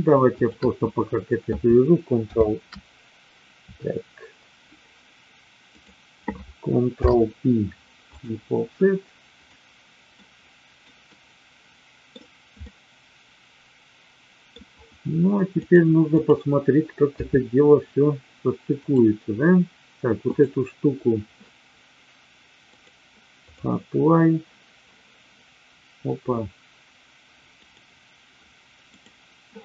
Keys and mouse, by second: 0.3 shift+click, 2.2 ctrl+o, 6.8 ctrl+p, 9.4 click, 10.1 middle click, 11.1-12.1 middle drag, 12.7-14.4 middle drag, 15.6-16.4 drag, 17.1 KP_3, 20.3 click, 22.7-25.0 drag, 27.7 click, 29.0 click.